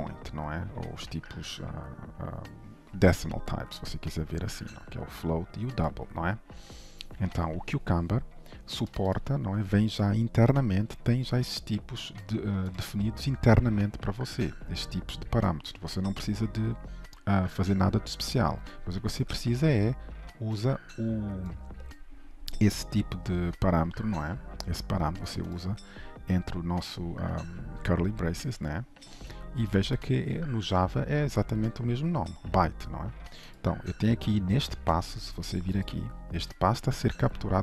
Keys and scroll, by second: 36.1 ctrl+b.